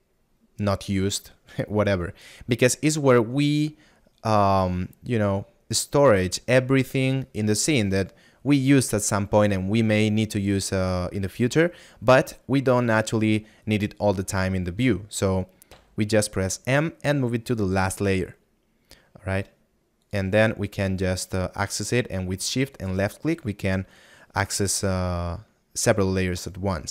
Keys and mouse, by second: 25.3 middle click.